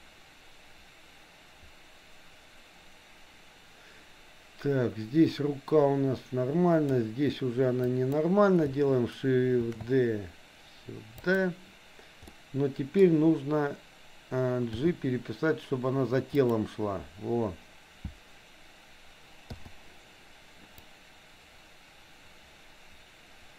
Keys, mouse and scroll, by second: 7.9 click, 9.6 shift+d, 12.4 middle click, 14.8 g, 19.5 i, 20.9-23.5 drag.